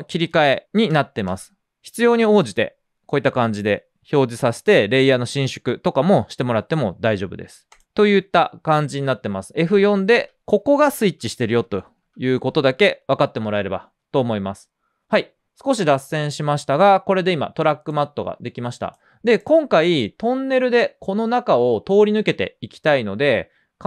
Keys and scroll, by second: 0.6 F4, 11.9 typing.